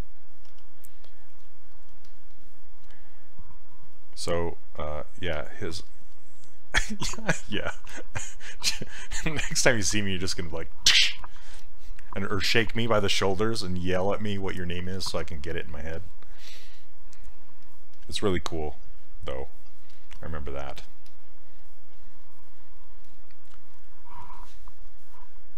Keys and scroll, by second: 0.5 s.